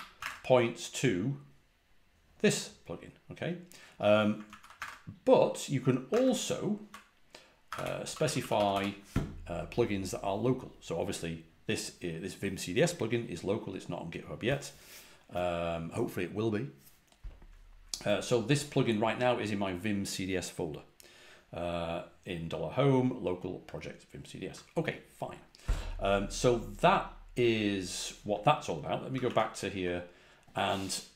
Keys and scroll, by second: 0.1 super+Tab, 0.1 ↻, 4.4 super+w, 6.0 super+Tab, 7.6 Escape, 8.0 typing, 10.1 typing, 29.0 ctrl+a, 29.2 ctrl+h.